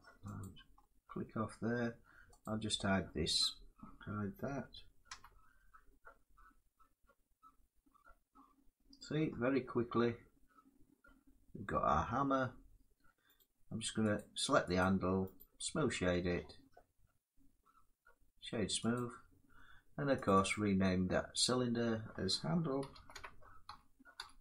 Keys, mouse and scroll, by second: 0.1 click, 1.1 middle click, 2.1 click, 2.7 Tab, 3.1 click, 4.8 h, 8.0 middle click, 8.7 scroll down 2, 11.9 middle click, 13.1 right click, 13.8 click, 14.5 click, 15.1 right click, 18.6 click, 19.9 click, 20.2 click, 22.5-24.1 typing.